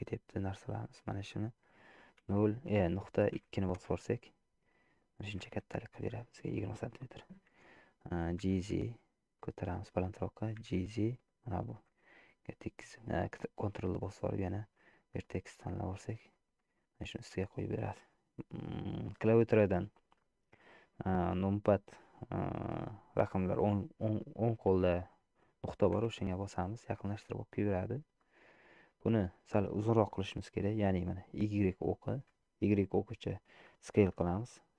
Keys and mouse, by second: 1.3-4.5 drag, 5.6 middle click, 8.6 g, 10.6 g, 15.4 middle click, 16.4 shift+middle click, 16.8 middle click, 26.0 KP_Decimal, 28.4 middle click, 29.3 middle click, 30.1 middle click.